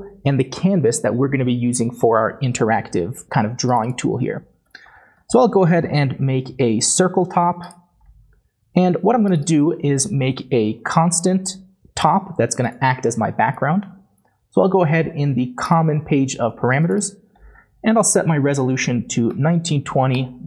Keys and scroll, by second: 4.7-5.3 typing, 10.1-11.0 typing, 18.0-20.2 typing, 18.8 Tab.